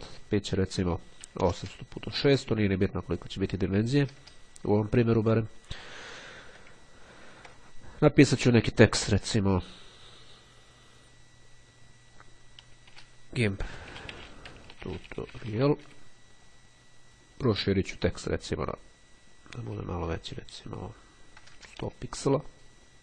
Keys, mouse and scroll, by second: 0.0 click, 1.0 8, 1.1 KP_0, 3.2 click, 3.6 KP_6, 5.5 click, 7.1-7.6 ctrl+scroll up 2, 8.9 click, 13.0-16.5 typing, 17.7 click, 19.0 KP_1, 21.6 KP_0, 21.8 KP_Enter.